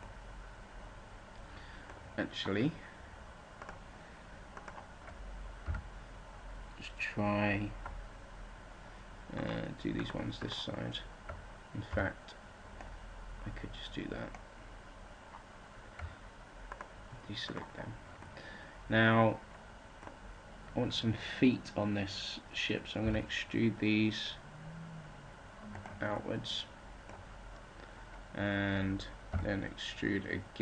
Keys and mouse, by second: 3.5-5.5 middle drag, 6.3 a, 11.8 b, 16.6-21.5 middle drag, 22.9 e, 26.1-27.3 drag, 27.3-29.2 middle drag, 29.2 e.